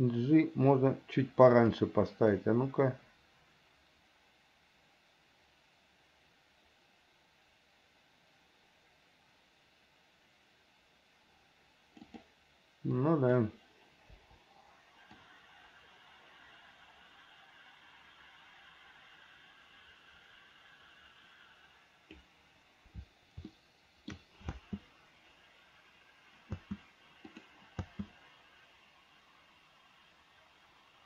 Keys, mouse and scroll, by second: 0.0 g, 2.6-12.4 drag, 13.2 click, 14.4 Delete, 15.4-22.5 drag, 23.7 shift+middle click, 24.7 space, 26.7 space, 27.5 click.